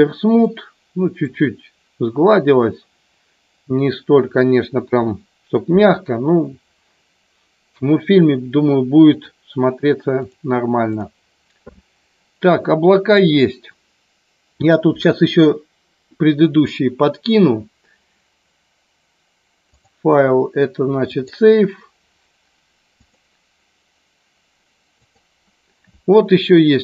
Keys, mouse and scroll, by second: 0.4 middle click, 4.8 KP_1, 9.3-10.4 drag, 10.9 click, 19.6-21.4 drag, 23.0-25.4 drag.